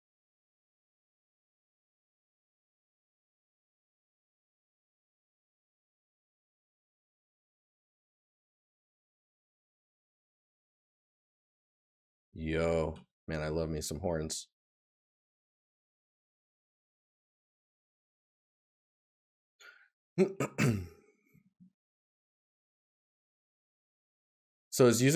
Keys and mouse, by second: 1.5 right click, 5.0 right click, 9.2 right click, 15.4 right click, 17.7 right click, 22.7 right click.